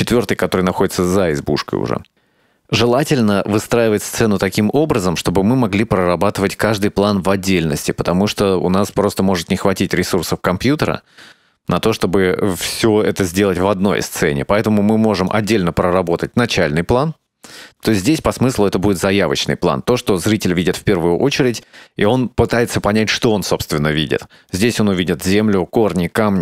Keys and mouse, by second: 2.1-15.4 drag, 17.6 click, 24.6-26.4 drag.